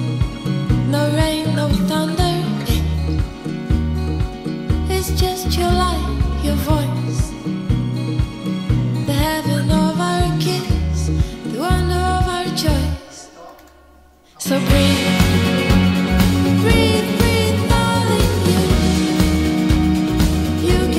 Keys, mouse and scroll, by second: 12.8-13.9 typing, 15.2 click, 16.0-18.8 drag, 18.6-20.9 typing.